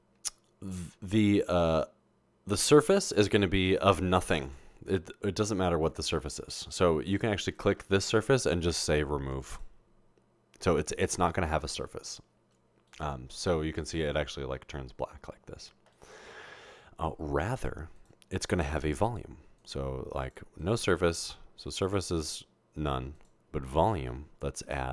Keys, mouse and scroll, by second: 2.1 middle click, 2.1-3.3 scroll down 2, 2.5-3.3 middle drag, 3.3 click, 4.4 click, 7.6 click, 18.0 click, 19.6 click, 20.2 click, 20.6 click, 21.9 click, 23.2-23.6 drag, 23.8 click, 24.7 click.